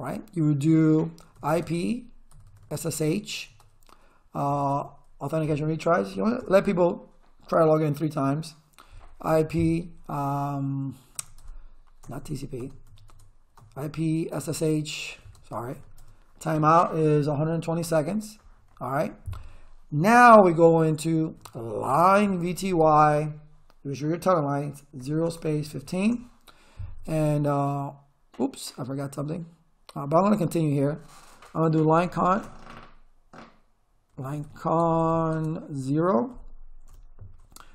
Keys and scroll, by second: 1.0-4.5 typing, 4.7 Tab, 6.1 3, 6.4 Return, 9.0-9.8 typing, 11.1-15.7 typing, 11.4 Tab, 13.1 Tab, 16.0 Tab, 17.0-18.1 typing, 21.0-23.1 typing, 25.0-26.3 typing, 31.5-32.4 typing, 33.9-36.3 typing, 36.9 Return.